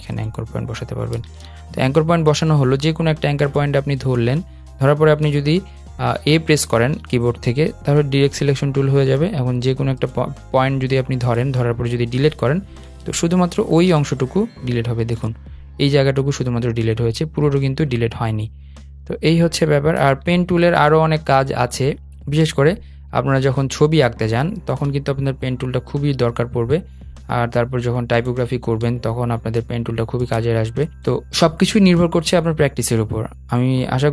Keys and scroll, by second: 1.1 super+z, 5.5 a, 12.1 BackSpace.